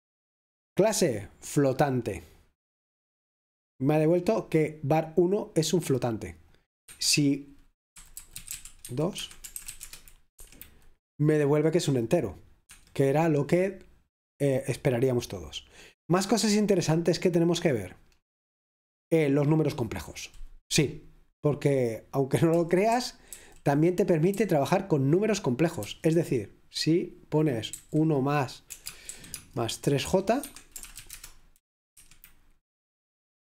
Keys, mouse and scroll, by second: 2.3-3.7 drag, 6.6-8.2 drag, 8.0-10.2 typing, 10.5 F5, 12.8 Escape, 14.7-16.8 scroll down 1, 16.8-17.9 scroll down 1, 17.9-19.4 scroll down 1, 19.4-20.7 scroll down 1, 20.7 scroll down 1, 22.7 typing, 25.1-25.9 typing, 30.5 Escape, 30.5-31.4 typing, 32.0 F5.